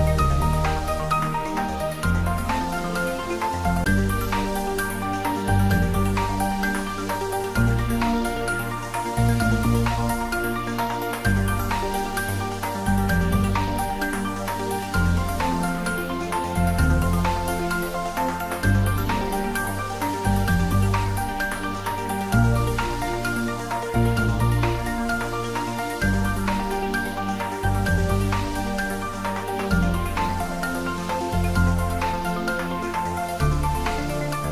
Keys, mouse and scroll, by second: 1.4 shift+click, 1.8-3.1 middle drag, 3.1-3.8 typing, 8.4-9.4 typing, 8.4 click, 11.9 click, 12.4-15.2 middle drag, 15.2 click, 15.9-16.4 scroll up 1, 17.0-22.4 middle drag, 23.9 e, 29.1 click, 29.6-34.5 middle drag.